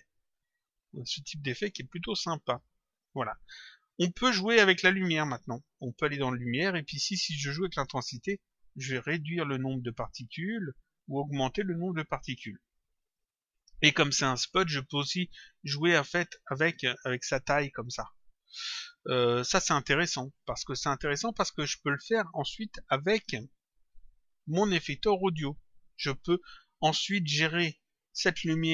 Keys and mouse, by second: 1.5 click, 6.3 click, 7.6 click, 8.8 click, 10.7 click, 13.5 click, 16.7 click, 20.3 click, 27.1 click.